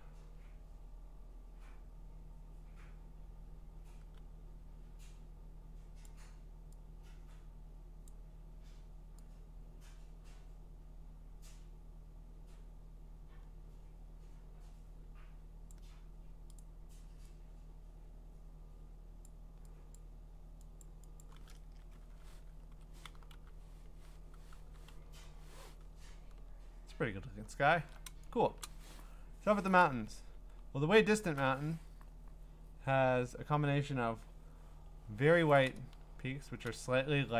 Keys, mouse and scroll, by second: 6.0 click, 8.1 click, 15.7 click, 16.6 click, 19.2 click, 19.9 click, 20.8 click, 21.2 click, 21.6 Return, 22.7-25.5 typing, 26.0-28.0 scroll, 28.6 click, 29.8-31.2 scroll, 34.4 scroll, 36.3-37.3 scroll.